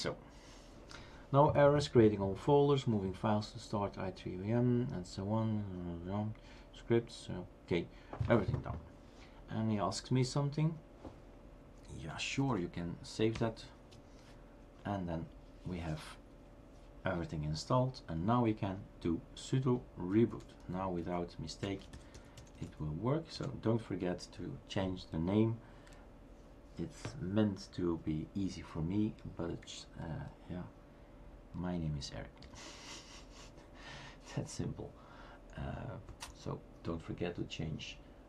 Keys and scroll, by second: 11.8-12.6 typing, 14.1-14.9 typing, 20.0-20.7 typing, 21.9 typing, 23.3-24.9 typing, 32.5 Return.